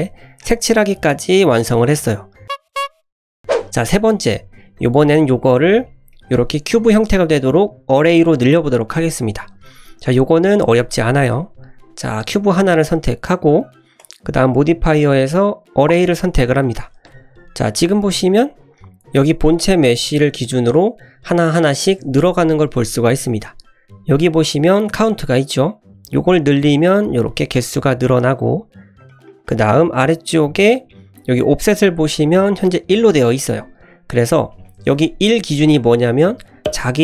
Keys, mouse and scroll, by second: 1.2-1.8 scroll down 2, 2.0-2.4 scroll down 1, 5.2 click, 5.8-6.1 scroll down 2, 6.1 middle click, 11.4 click, 12.1 click, 13.9 click, 15.1-16.1 drag, 16.8 scroll down 1, 17.1 `, 17.9 shift+middle drag, 18.2-18.6 middle drag, 18.9 click, 19.7-20.1 drag, 26.2 click, 27.0-28.0 scroll down 2, 28.0 click, 29.0 click, 33.5-34.6 scroll up 3, 34.6 click.